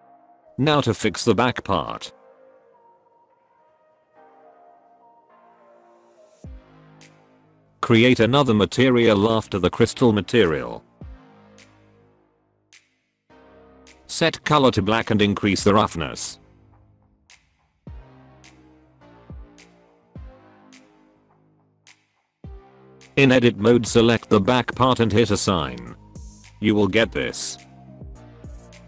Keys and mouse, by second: 1.2-1.5 middle drag, 1.6 shift+middle click, 1.8 middle click, 2.0 middle click, 2.8 shift+middle click, 6.6 click, 7.7 click, 10.4 right click, 12.7 click, 16.0-17.1 drag, 17.3 click, 19.0 Tab, 20.0 middle click, 23.2 middle click, 25.3 click, 27.5 middle click, 27.7 Tab, 28.1-28.8 middle drag.